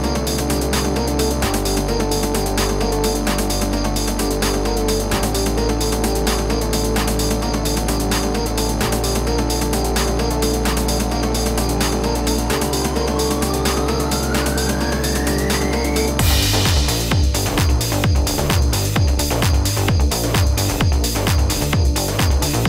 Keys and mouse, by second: 0.9 click, 3.0 click, 4.4 click, 6.0 click, 7.6 click, 8.7 click, 13.5 ctrl+KP_0, 15.6 click, 16.5 click, 18.2 click, 19.1-19.6 typing, 20.2 alt+click, 21.0 ], 21.1 ], 21.2 ], 21.2 ], 21.6 ctrl+a, 21.8 Delete.